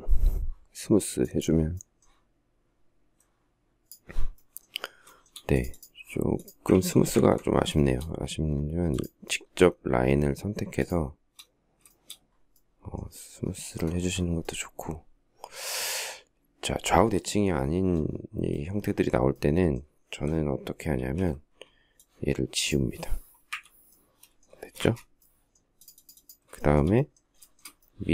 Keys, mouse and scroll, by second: 4.7 shift+middle click, 6.4 ctrl+z, 7.4 shift+middle click, 10.4 shift+click, 11.5 shift+middle click, 20.6 alt+t, 23.1 Delete, 24.3 space, 24.4 Escape, 26.2 shift+middle click, 26.4 shift+double middle click, 27.2 shift+double middle click.